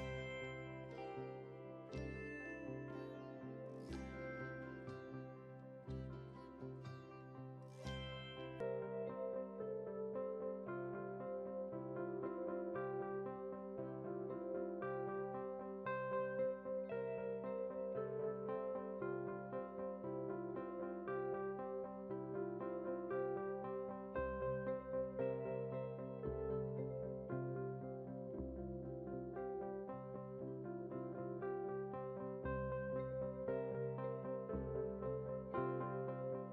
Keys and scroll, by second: 33.3 ctrl+z.